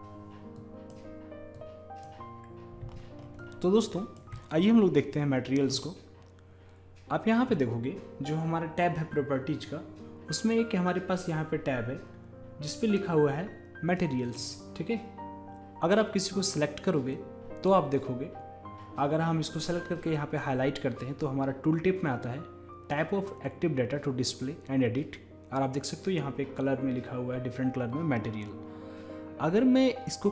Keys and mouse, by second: 0.0 F11, 0.6-5.2 drag, 3.4-5.2 middle drag, 14.4-16.1 drag, 17.2-19.0 drag.